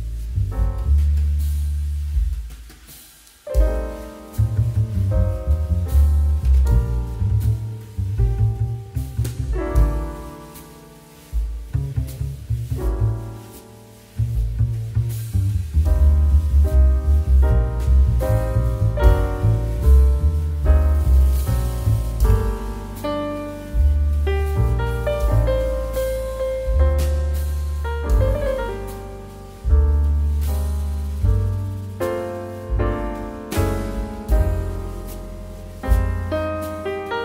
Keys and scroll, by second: 10.4 2.